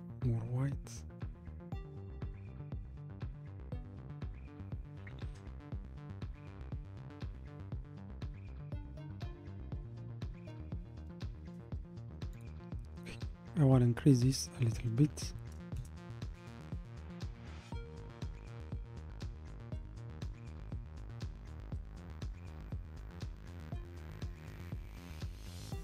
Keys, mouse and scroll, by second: 12.3-15.5 drag, 20.3-24.0 drag.